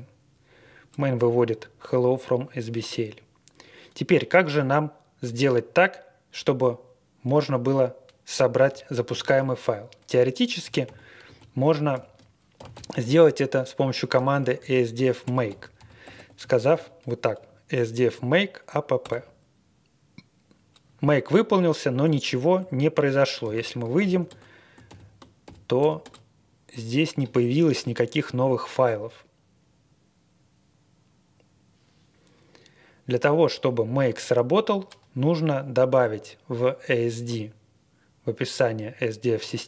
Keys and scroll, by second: 9.1 shift+9, 10.3-13.4 typing, 14.4-16.5 typing, 19.0 Return, 23.4 ctrl+d, 23.9-24.2 typing, 24.8 ctrl+l, 25.4-26.0 typing.